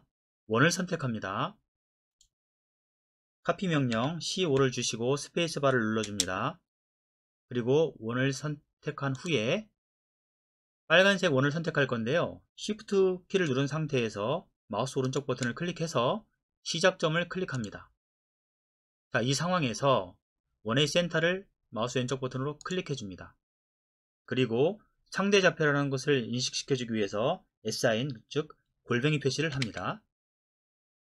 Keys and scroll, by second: 3.9-4.6 typing, 6.0 typing, 29.6 shift+2.